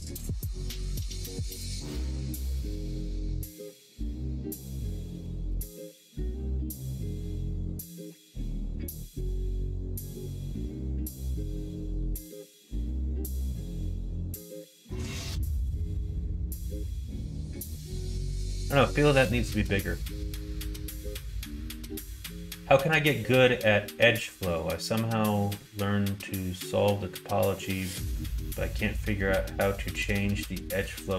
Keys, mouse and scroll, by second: 0.7 middle click, 1.2 shift+middle click, 1.8 middle click, 4.0 middle click, 5.2 r, 10.3 middle click, 11.3 middle click, 12.2 alt+z, 12.6 Tab, 13.4 middle click, 14.4-17.8 middle drag.